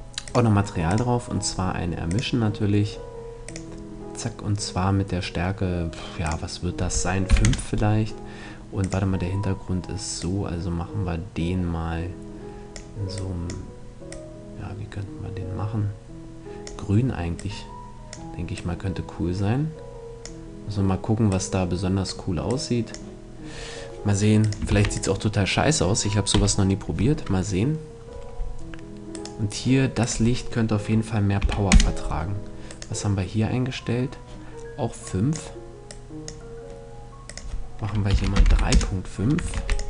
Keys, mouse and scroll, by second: 5.8-7.6 drag, 8.3-10.1 drag, 24.0-25.6 drag, 24.2 ctrl+s, 25.8 t, 27.2 middle click, 28.8-31.1 right drag, 29.5-31.5 drag, 32.2-33.9 right drag, 34.6-38.6 drag, 39.0 ctrl+s.